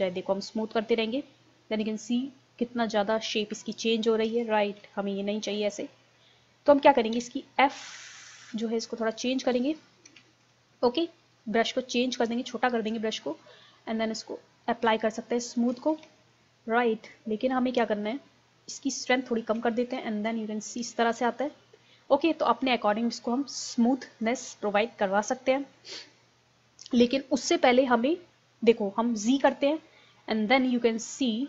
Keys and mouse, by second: 4.9 ctrl+z, 7.2 f, 8.6-10.1 drag, 10.1 ctrl+z, 10.5 click, 14.5 click, 15.4-17.1 middle drag, 16.0 ctrl+z, 17.1-19.2 drag, 19.8-22.1 drag, 21.2 ctrl+z, 22.9-24.7 drag, 29.5 z.